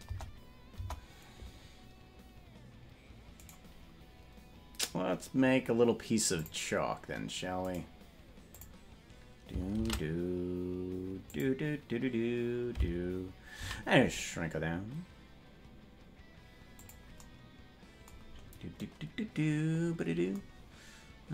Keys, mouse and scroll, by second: 0.0 KP_0, 0.7 KP_0, 3.4-6.3 right drag, 6.3 click, 7.7 right click, 8.4 click, 9.7 shift+a, 17.3 s, 18.2-18.8 scroll up 5.